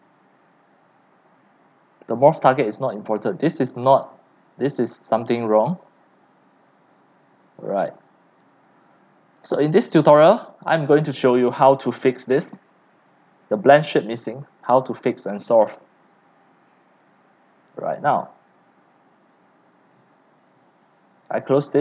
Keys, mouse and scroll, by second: 0.8-2.9 drag, 2.9 scroll, 3.0 click, 4.0 right click, 6.0 click, 6.7-15.0 drag, 17.2 click, 18.0-20.1 scroll up 7, 20.1-21.5 drag.